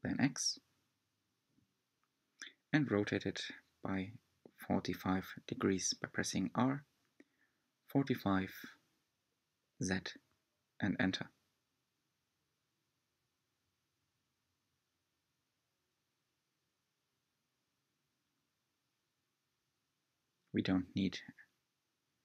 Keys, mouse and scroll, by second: 6.2 s, 9.6 r, 12.0-14.1 middle drag, 14.1-15.0 scroll up 2, 15.0-17.6 middle drag, 17.6 g, 19.0-20.9 middle drag, 20.9 Tab, 21.9 3.